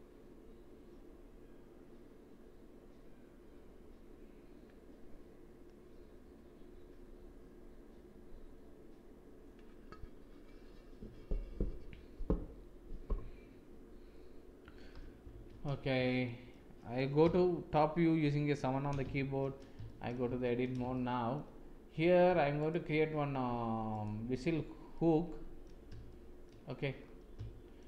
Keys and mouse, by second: 14.8 KP_7, 15.3 shift+z, 16.2 shift+middle drag, 17.1 KP_1, 18.2 KP_7, 19.1 shift+z, 19.8 shift+click, 20.2 Tab, 20.9 shift+click, 23.8 alt+click, 24.8-25.6 drag, 26.0 shift+click, 27.4 shift+click.